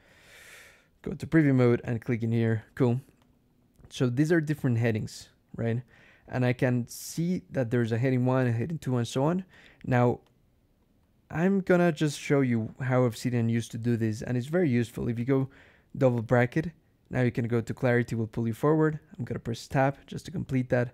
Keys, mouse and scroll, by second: 0.9 click, 1.7 click, 2.5 click, 3.1 click, 4.2 click, 4.6 ctrl+e, 6.4-6.7 scroll down 2, 7.0 scroll up 2, 9.0 click, 9.4 click, 10.1 click, 10.9 BackSpace, 11.3 click, 11.9 click, 15.0 [, 17.1-18.3 typing, 19.5 Tab.